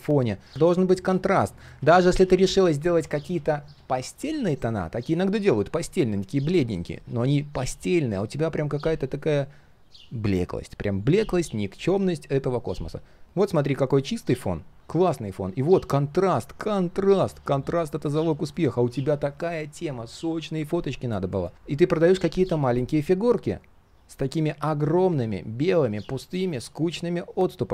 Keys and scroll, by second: 0.7 ctrl+z, 1.1 ctrl+z.